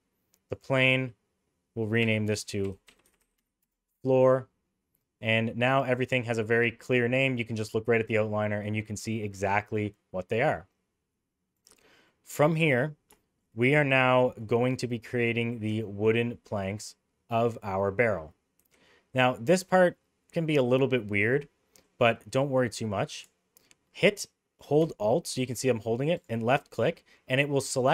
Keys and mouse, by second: 0.5 click, 2.0 F2, 3.2 o, 11.5 click, 12.1 middle click, 13.2 shift+middle drag, 15.7 Tab, 18.6 2, 26.2 alt+click.